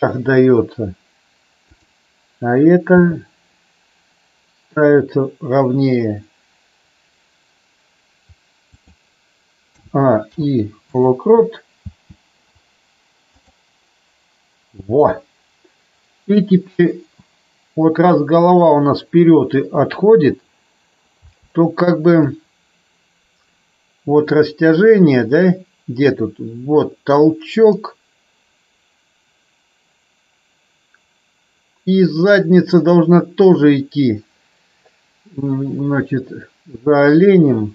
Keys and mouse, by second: 0.0 click, 1.7 click, 3.0 g, 8.7 click, 9.7 a, 10.2 i, 11.8 space, 21.2 space, 22.2-37.7 drag.